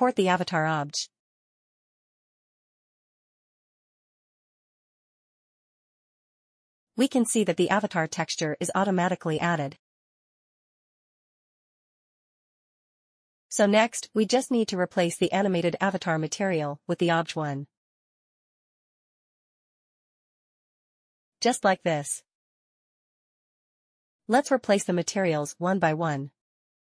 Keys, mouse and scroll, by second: 2.2 click, 2.4 double click, 3.3 click, 5.7 click, 6.8 click, 14.7 click, 17.4 scroll up 1, 18.3 click, 20.0 click, 22.4 scroll up 1, 24.7 click.